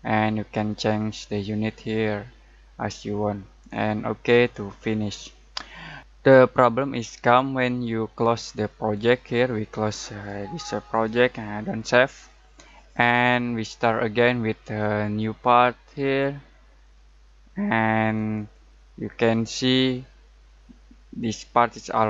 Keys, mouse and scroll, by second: 4.3 click, 10.0 click, 15.4 click, 18.3 click.